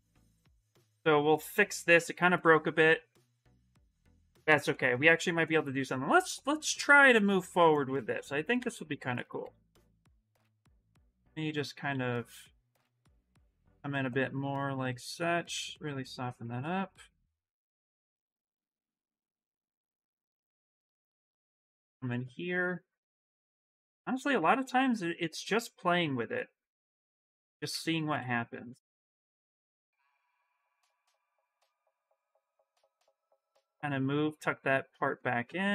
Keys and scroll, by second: 6.9 s, 7.7 ctrl+z, 7.9 ctrl+z, 8.3 ctrl+z, 8.6 ctrl+z, 8.8 ctrl+z, 9.2 ctrl+z, 9.5 ctrl+z, 9.8 ctrl+z, 10.0 ctrl+z, 10.1 ctrl+z, 10.3 ctrl+z, 10.5 ctrl+z, 11.1 s, 18.8 s, 20.5 w, 27.5 ctrl+z, 27.7 ctrl+z, 27.9 ctrl+z, 30.1 ctrl+shift+z, 30.4 ctrl+shift+z, 31.2 q, 31.6 s.